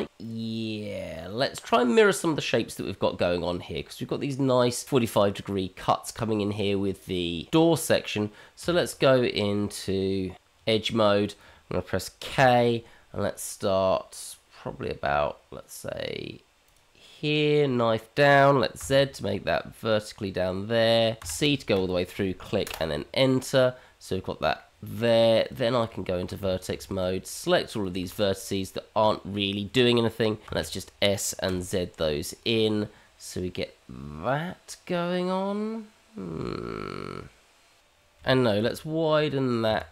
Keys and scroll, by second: 8.6 Tab, 12.3 k, 25.9 Tab, 26.7 shift+z, 26.8 Tab, 28.2 shift+z, 29.4 shift+z, 30.5 s, 38.3 ctrl+r, 39.5 ctrl+z, 39.8 ctrl+z.